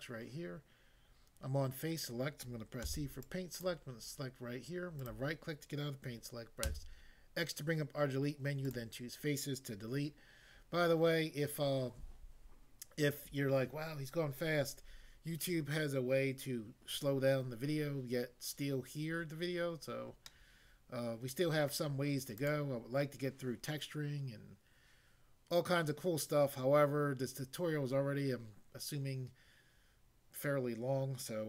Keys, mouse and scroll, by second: 2.8 c, 3.2 click, 3.6 click, 5.0 right click, 6.6 x, 8.7 click, 20.2 middle click, 21.7 middle click, 22.4 click.